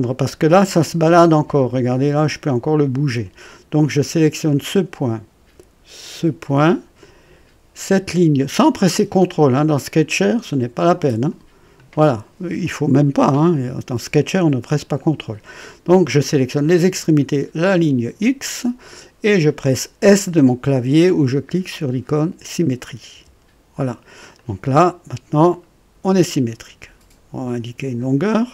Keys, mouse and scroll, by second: 0.0 right click, 1.1 right click, 2.2 click, 4.5 click, 6.3 click, 11.2 click, 23.0 s, 24.3 click, 25.5-27.8 drag.